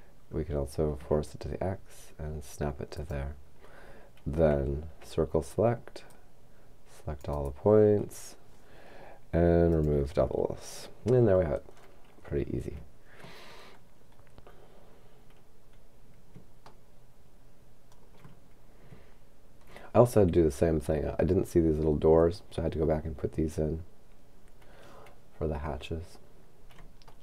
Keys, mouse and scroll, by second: 1.0 x, 2.9 click, 5.0 c, 6.1-8.5 drag, 9.7 click, 11.8-14.6 scroll down 3, 14.6-14.9 scroll down 1, 16.8-18.9 shift+middle drag, 20.0-21.2 scroll up 2, 25.6-27.0 scroll down 3.